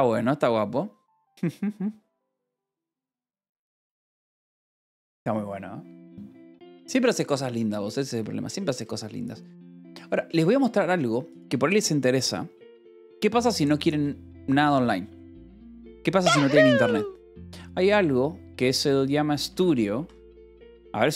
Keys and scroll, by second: 10.2 Escape, 17.5-20.9 typing, 20.9 Return.